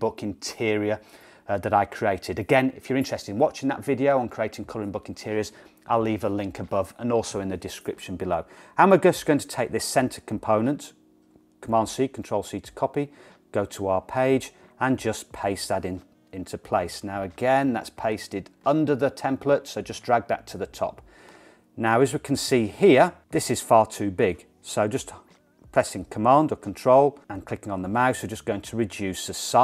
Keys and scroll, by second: 11.6 super+c, 15.1 super+v.